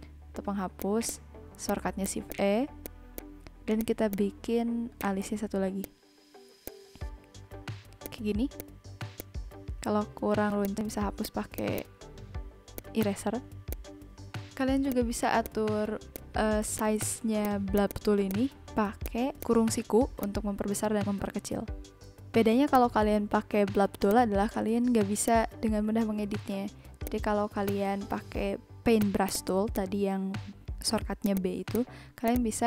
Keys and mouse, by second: 0.8 click, 2.8 click, 3.8 click, 4.3 b, 5.0 click, 5.8 click, 6.6 click, 7.5 ctrl+z, 8.0 click, 8.6 click, 9.1 click, 10.3 [, 10.6 click, 11.2 click, 12.4 shift+e, 12.7 click, 13.7 click, 14.5 [, 14.9 click, 15.4 click, 15.7 n, 16.0 v, 16.1 click, 16.4 n, 19.3 click, 20.2 click, 21.1 click, 22.2 [, 22.7 click, 23.6 b, 24.0 click, 25.2 click, 27.0 click, 27.5 z, 27.6 click, 28.8 a, 29.0 click, 29.1 a, 29.2 click, 30.4 click, 31.2 click, 32.0 ctrl+z, 32.2 click.